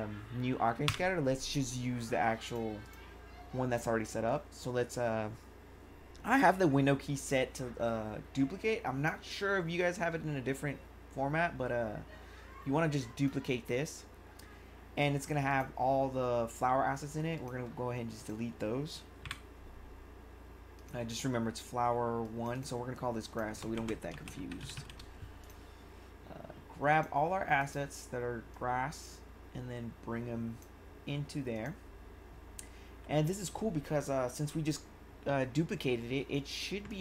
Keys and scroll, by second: 23.5-25.1 typing.